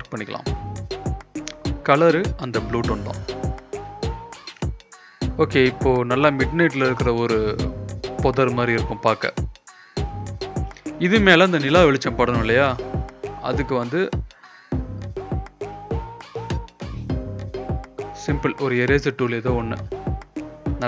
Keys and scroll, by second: 1.4 Return, 1.9 ctrl+b, 8.0 Return, 8.7 ctrl+m, 11.8 Return, 12.5 ctrl+b, 17.7 Return.